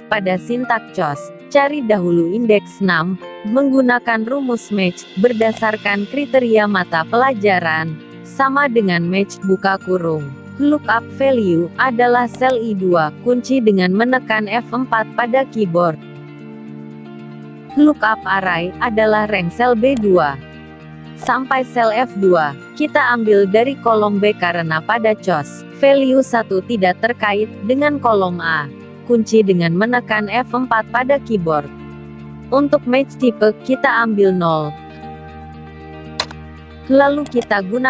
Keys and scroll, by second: 13.2 F4, 28.7 F4.